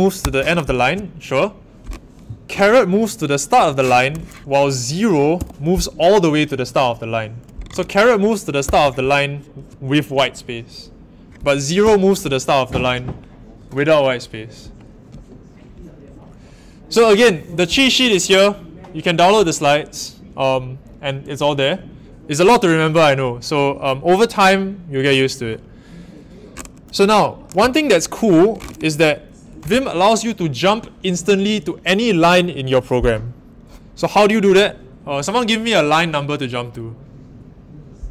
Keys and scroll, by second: 0.2 shift+4, 3.5 shift+6, 5.3 0, 8.6 shift+6, 11.8 0.